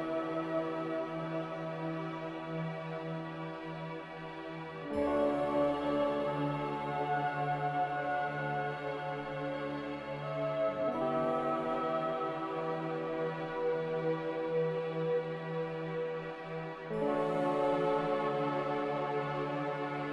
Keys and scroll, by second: 3.4 typing, 4.1 Return, 16.2 z.